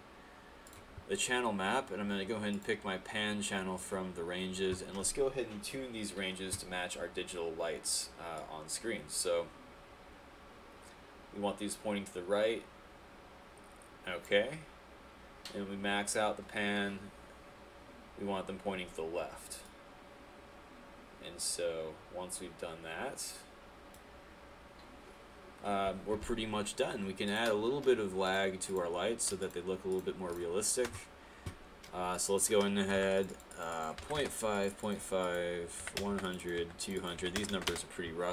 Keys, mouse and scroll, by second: 34.2 Return, 37.8 Return.